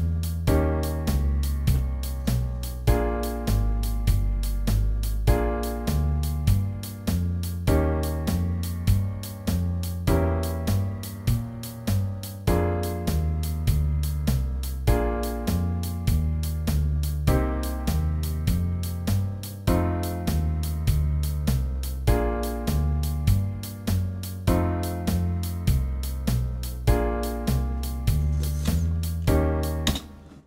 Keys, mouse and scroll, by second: 29.9 space.